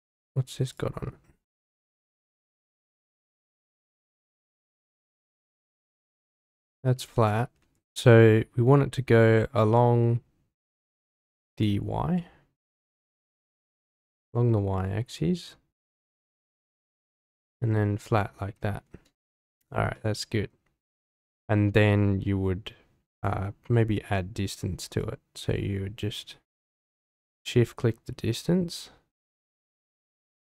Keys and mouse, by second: 0.7-1.6 drag, 2.6 middle click, 3.2 click, 3.6 middle drag, 4.2 Tab, 6.7 Tab, 7.6 Tab, 11.2 Tab, 11.5 click, 13.1 click, 16.5 click, 17.5-18.8 middle drag, 19.2 shift+middle drag, 19.9-20.5 middle drag, 23.2 click, 25.0-30.0 shift+drag, 30.3-30.5 drag.